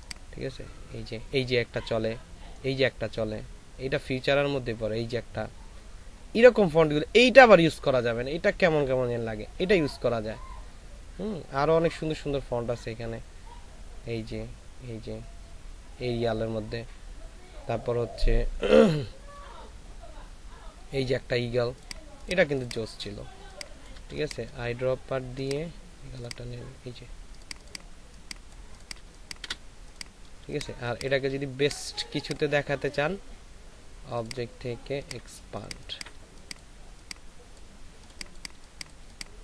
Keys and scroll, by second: 24.1 shift+space, 29.0 ctrl+alt+space, 30.6 ctrl+space, 35.7 space, 39.0 space.